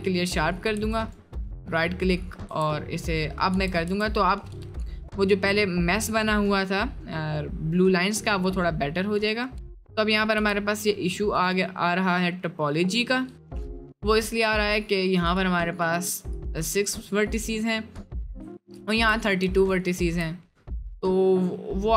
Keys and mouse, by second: 0.7 Tab, 1.0 click, 3.0 Tab, 3.0 middle click, 4.8 middle click, 5.6 middle click, 6.4 middle click, 9.2 right click, 10.5 g, 11.8 middle click, 13.7 middle click, 14.2-14.6 middle drag, 16.9 click, 18.0 click.